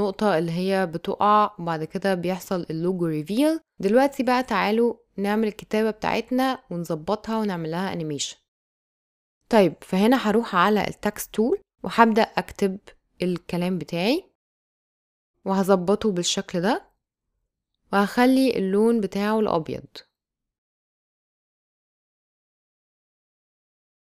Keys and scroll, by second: 1.6 space, 11.3-13.1 typing, 20.9 shift+e, 21.4 super+a.